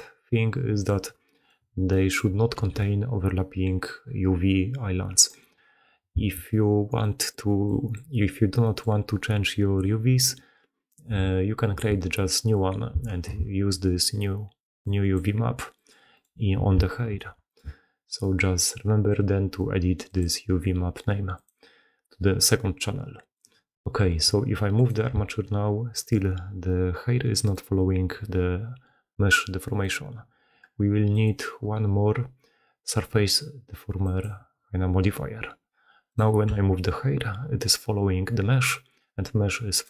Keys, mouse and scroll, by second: 0.8-1.2 middle drag, 1.2 click, 1.9 drag, 2.5 g, 6.0 a, 7.1 middle drag, 7.2-8.7 middle drag, 9.0 middle click, 9.2-10.2 middle drag, 13.3 Tab, 13.4 middle drag, 13.9 middle click, 14.7-15.0 drag, 15.0 middle drag, 15.3 middle drag, 15.8 middle drag, 16.2-17.4 middle drag, 17.1 alt+h, 21.5-22.8 middle drag, 23.1 middle drag, 24.7 click, 25.0 g, 25.2-25.7 middle drag, 31.1-34.0 drag, 36.4 g.